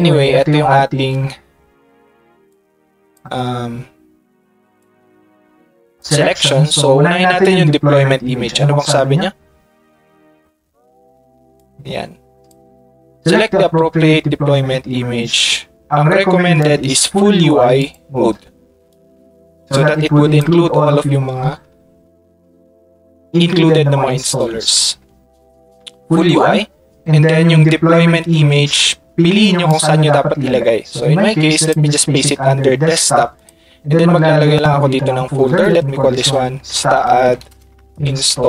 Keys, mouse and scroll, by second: 2.5-3.1 drag, 4.8-5.5 drag, 5.8 click, 8.2 middle click, 8.7 middle click, 9.6 middle click, 11.5 click, 11.8 click, 12.2 drag, 16.6 click, 16.8 drag, 17.8 click, 18.9 click, 19.0-19.7 drag, 20.0 click, 20.9 click, 33.4 click, 36.7 shift+s, 37.2 a, 37.5 space.